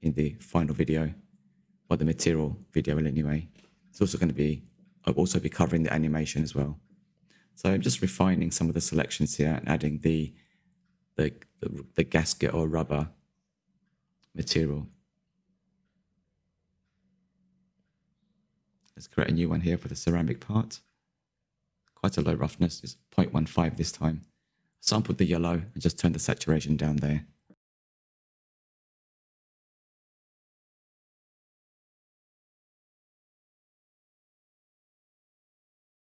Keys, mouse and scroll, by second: 0.1 click, 0.1 Tab, 0.7 alt+click, 1.2-2.3 drag, 2.3 Tab, 2.4 click, 2.5-2.8 scroll down 6, 2.8 shift+middle click, 3.1-3.4 scroll up 5, 3.4 click, 3.5 Tab, 4.1 alt+click, 4.7-6.3 middle drag, 6.3 alt+shift+click, 6.9 click, 7.1 Tab, 7.3 middle click, 8.0 scroll up 1, 8.0 scroll down 9, 8.3 shift+middle click, 8.7-9.1 scroll up 3, 8.8 shift+middle click, 9.1 shift+middle click, 9.3 click, 9.4 Tab, 9.7 alt+click, 10.4 click, 11.2 Tab, 11.5-12.1 scroll down 8, 12.1-12.9 middle drag, 12.9 click, 13.6 click, 14.0-14.3 scroll down 1, 14.3 shift+middle click, 15.0 click, 15.8 click, 16.2-17.4 ctrl+middle drag, 17.4 click, 17.7 shift+middle click, 18.3 scroll up 2, 18.6 shift+middle click, 19.2-20.7 drag, 21.0-21.8 scroll down 1, 21.8-22.8 drag, 23.0 click, 25.6 click, 25.7-26.2 scroll down 3, 26.2-28.2 middle drag, 28.2 click, 28.3 Tab, 28.5 scroll up 2, 28.7 2, 29.3 3, 29.6 scroll down 2, 30.0-34.5 drag, 34.5 l, 34.9 click, 35.2 Tab.